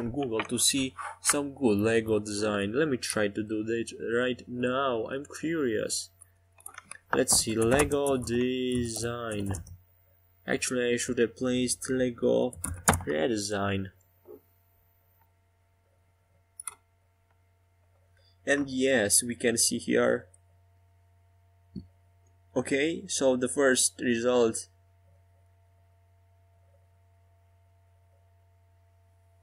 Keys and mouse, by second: 4.4 Tab, 5.8 click, 8.4 e, 10.0 s, 15.3 e, 17.1 s, 22.4-25.1 typing, 26.8 e, 27.6 s.